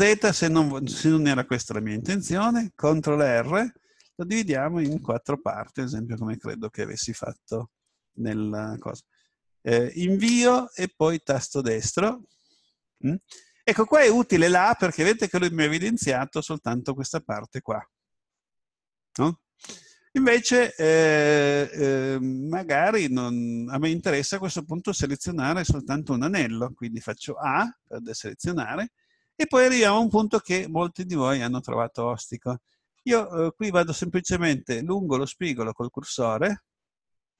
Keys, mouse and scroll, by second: 3.2 ctrl+r, 11.8 right click, 27.5 a, 28.0-30.3 middle drag.